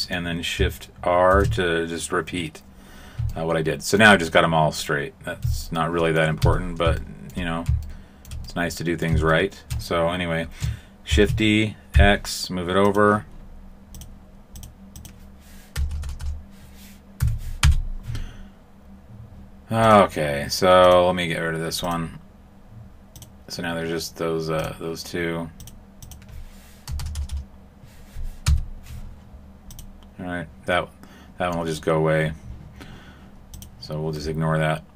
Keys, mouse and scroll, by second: 1.3 shift+r, 4.7 middle click, 5.4 a, 5.7 middle click, 6.4 Tab, 7.0 shift+middle click, 7.8 shift+middle click, 8.4 middle click, 9.3 shift+middle click, 11.1 shift+d, 13.9 click, 14.6 click, 15.9 BackSpace, 16.0 BackSpace, 19.8 click, 21.8 click, 23.1 click, 25.6 click, 26.9 BackSpace, 27.1 BackSpace, 29.7 click.